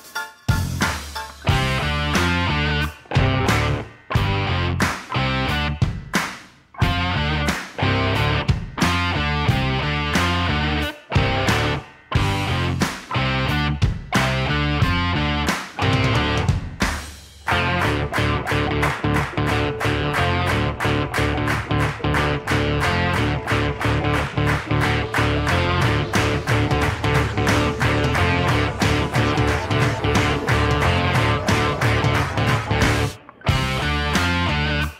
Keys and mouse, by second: 1.4 Delete, 2.9 click, 4.4-6.0 drag, 7.8 click, 8.3-10.8 drag, 12.1 click, 15.1-16.3 drag, 16.8 click, 18.1-18.5 middle drag, 19.2 click, 19.9-20.9 drag, 21.2 middle click, 21.9 click, 23.0 click, 23.3 click, 23.6 click, 24.0 shift+middle click, 24.8 click, 25.7 click, 26.0 shift+middle drag, 27.2-28.5 drag, 29.2 click, 30.3 shift+d, 31.3 g, 31.4 z, 34.6 click.